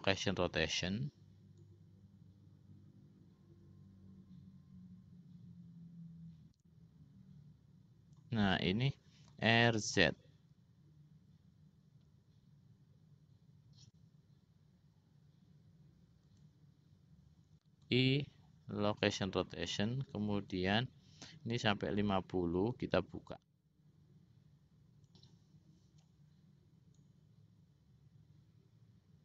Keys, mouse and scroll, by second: 2.1-8.7 drag, 9.7 r, 18.1 i, 21.1-25.9 drag, 27.5-29.2 drag.